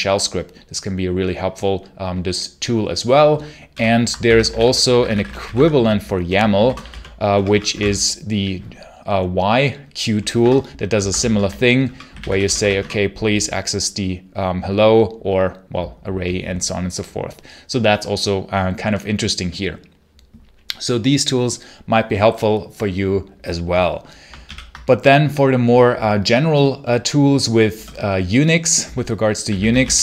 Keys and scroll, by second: 3.6 ctrl+l, 3.8-7.6 typing, 10.2 Return, 10.8 Escape, 11.2-12.9 typing, 24.3 ctrl+l, 29.1-30.0 typing.